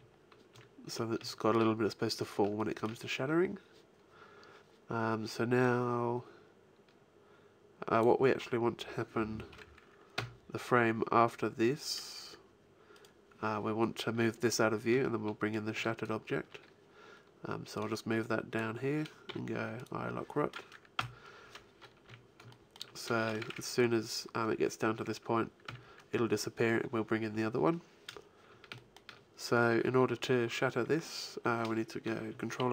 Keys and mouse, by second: 0.4 z, 1.3 click, 5.5-7.2 drag, 10.1 Right, 12.9 click, 13.4 click, 17.7-19.6 drag, 19.2 i, 20.9 Left, 21.9 a, 25.5 Right, 27.2 Left.